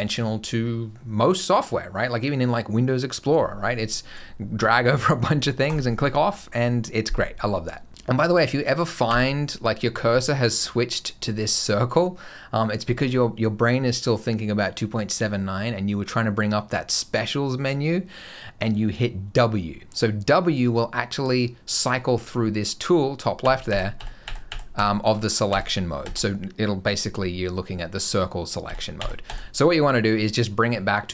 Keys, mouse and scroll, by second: 3.7 click, 5.5 click, 8.9 w, 23.2-25.9 typing, 28.5 w, 28.8 w, 29.1 w, 30.1 click.